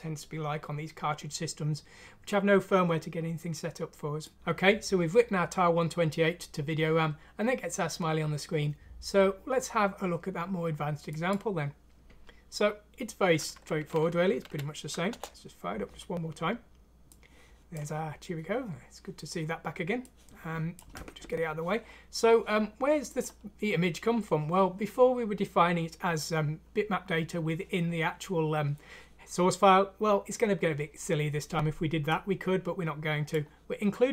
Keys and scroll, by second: 14.4 F6, 15.1 Return.